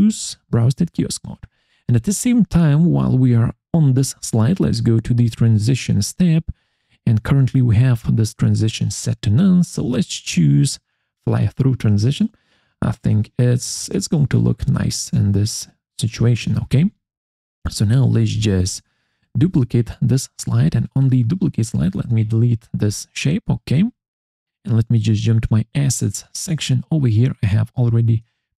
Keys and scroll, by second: 19.3 ctrl+d, 22.8 Delete.